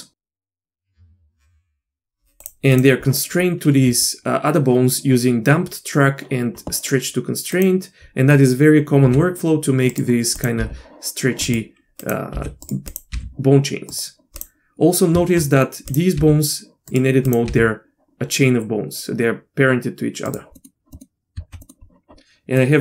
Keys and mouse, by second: 1.0 Tab, 2.7 click, 7.6 click, 9.0 g, 10.4 click, 10.6 g, 12.0 click, 14.4 g, 15.1 Tab, 15.9 click, 16.2 g, 17.3 click, 20.6 middle click, 20.6 g, 20.9 middle click, 21.5 Tab, 21.6 middle drag, 22.6-22.8 drag.